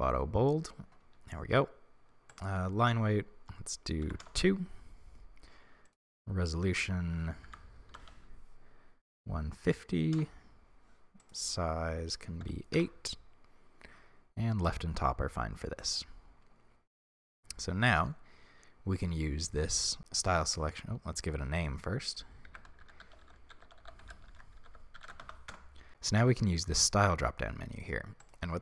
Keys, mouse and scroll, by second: 4.3-15.9 drag, 12.9 Return, 17.6-25.5 middle drag, 25.5 click, 25.5 n.